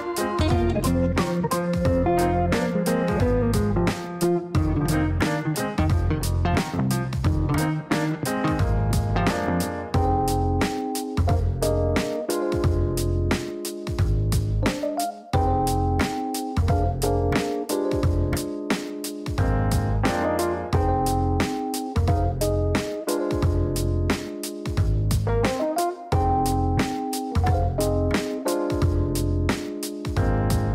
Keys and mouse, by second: 0.2 click, 5.2 click, 8.3 Delete, 9.8 click, 11.1 click, 15.5 click, 16.9 click, 17.4 click, 18.7 click, 19.4 click, 21.2-22.0 typing, 25.8-26.7 typing, 26.8 Down, 28.0-30.7 typing.